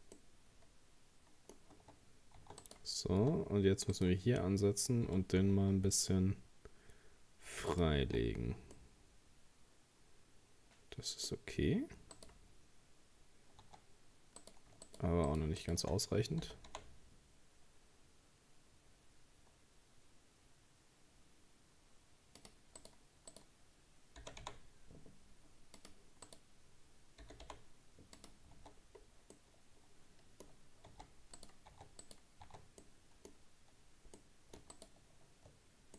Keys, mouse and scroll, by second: 0.2-1.8 middle drag, 1.8 Tab, 1.8-2.2 scroll up 1, 2.4 Tab, 2.6 right click, 3.2 Tab, 3.9 right click, 5.1 g, 8.1 Tab, 8.2-8.8 scroll down 3, 8.8-11.7 middle drag, 11.7-12.2 scroll down 3, 12.2 right click, 13.2-13.6 scroll up 1, 13.6 Tab, 14.0-14.4 scroll up 2, 14.4 right click, 14.9 shift+right click, 15.3 shift+right click, 15.6 shift+right click, 16.4 g, 22.8 right click, 23.3 right click, 24.2 g, 26.3 right click, 27.2 g, 28.6 Tab, 28.7-29.4 scroll down 3, 29.4-30.5 middle drag, 30.5-30.9 scroll up 4, 30.9 Tab, 31.4 right click, 31.7 Tab, 32.0 right click, 32.5 Tab, 32.8-34.7 middle drag, 34.7 shift+right click.